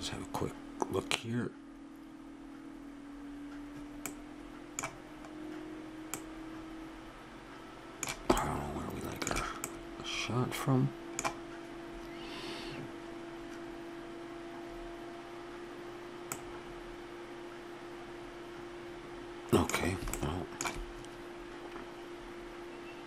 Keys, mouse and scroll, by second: 4.1-5.2 middle drag, 7.6 middle click, 8.6-11.7 middle drag, 16.3-18.1 middle drag, 20.4-22.2 middle drag.